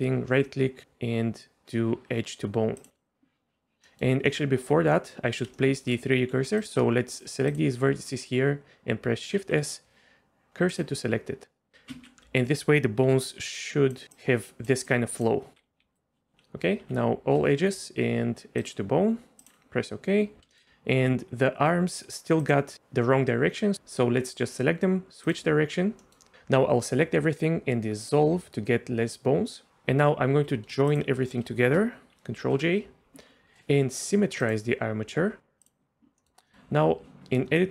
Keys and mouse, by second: 4.3 middle click, 4.9 middle click, 5.5 shift+middle click, 6.2 1, 7.1 shift+click, 9.4 shift+s, 11.7 s, 11.9 ctrl+z, 13.0-16.3 typing, 13.6 click, 14.1 click, 14.9 click, 16.0 click, 17.4 2, 17.4 a, 17.8-19.5 drag, 25.3 click, 26.0 middle click, 28.1-29.7 drag, 30.3 a, 32.4 ctrl+j, 34.4-35.7 drag, 36.2 middle click, 36.5 middle click, 37.2 Tab.